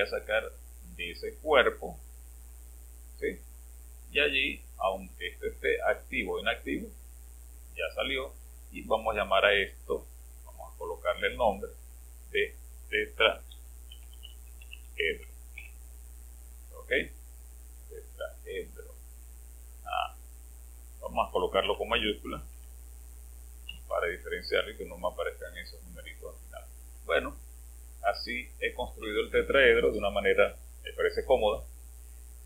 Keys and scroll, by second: 6.2 space, 13.1-16.0 typing, 21.7 Home, 22.5 Delete, 23.6 t.